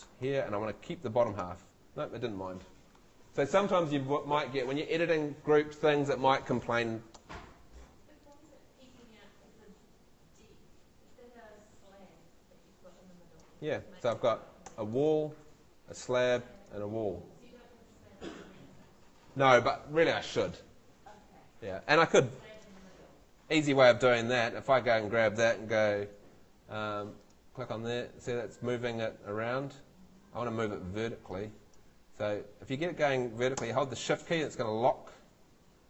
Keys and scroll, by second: 14.1 Escape.